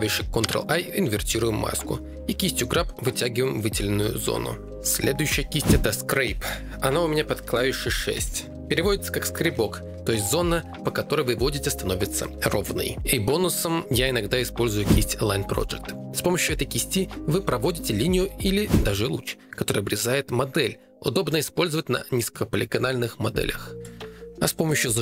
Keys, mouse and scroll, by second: 0.4 ctrl+i, 1.3 g, 1.3 f, 3.4 click, 3.6 click, 5.9 6, 13.2 click, 14.6 click, 16.6 click, 19.1 click.